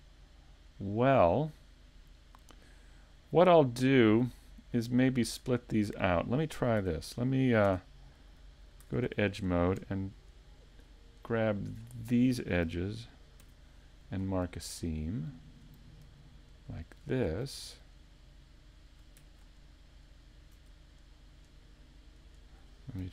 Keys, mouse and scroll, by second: 0.5 click, 4.1 shift+middle click, 5.1-5.6 scroll down 2, 5.6-6.0 scroll up 2, 6.1 scroll down 1, 6.8 Tab, 7.7 Tab, 8.8 ctrl+Tab, 11.3 alt+right click, 11.8 scroll up 1, 13.4 ctrl+e, 14.7 shift+middle click, 16.7 alt+right click, 17.8 shift+right click, 21.3 alt+shift+right click.